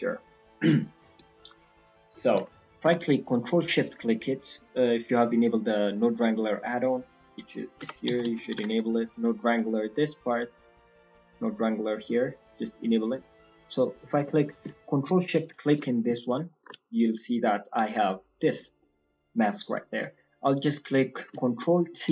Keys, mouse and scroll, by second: 2.8 ctrl+shift+click, 3.3-3.8 scroll down 4, 5.3 click, 13.8-14.2 scroll down 2, 14.2-14.5 scroll up 6, 15.3 ctrl+shift+click, 16.6 ctrl+shift+click, 17.3-18.4 scroll down 3, 17.9 middle click, 18.7 middle click, 19.0-20.0 scroll up 8, 19.3 middle click, 20.0 click, 20.5 click, 20.9 scroll down 5, 21.1 middle click, 21.9 ctrl+t.